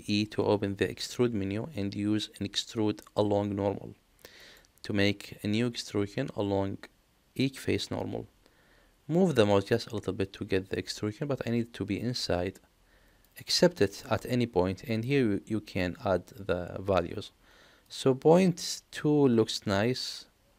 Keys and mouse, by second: 13.9 middle click, 14.9 click, 17.9-20.5 drag.